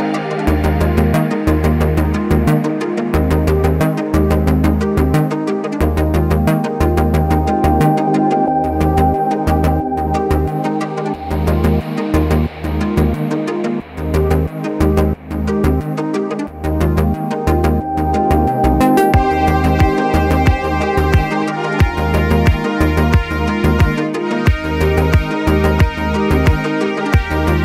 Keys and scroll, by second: 7.0-8.0 typing, 11.2 Escape, 17.5-18.0 typing, 20.9 k.